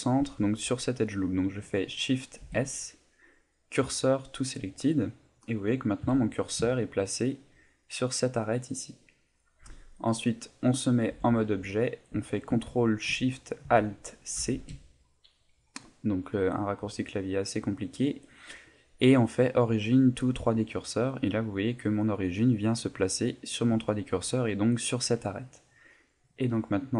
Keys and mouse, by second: 0.3 middle click, 0.9 middle click, 2.4 shift+s, 4.8 middle click, 6.0 KP_7, 6.7 ctrl+middle click, 11.1 Tab, 14.3 ctrl+alt+shift+c, 23.9 shift+middle click, 26.3 click.